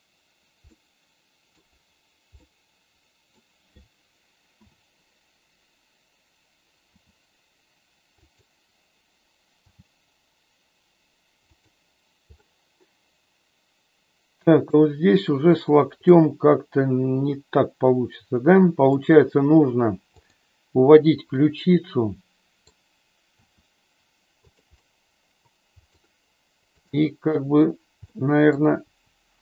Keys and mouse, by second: 0.7 middle click, 2.3-3.3 middle drag, 4.5 KP_7, 6.8 r, 8.2 click, 9.5 g, 11.5 click, 12.3-14.7 middle drag, 16.1-18.8 middle drag, 21.3-22.7 middle drag, 23.3 r, 24.8-26.0 middle drag, 26.7 click, 28.1 middle click, 28.6 click, 28.8 r.